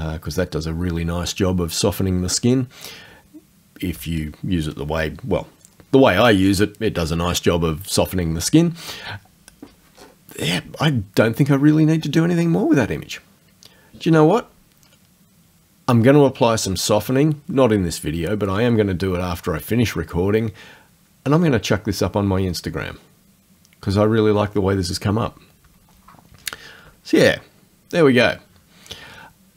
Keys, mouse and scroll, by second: 10.0-10.8 scroll down 2.